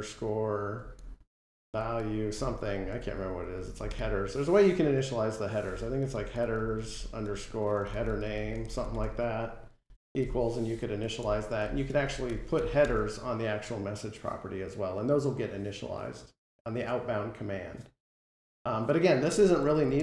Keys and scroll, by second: 10.7 Escape, 11.7 Delete.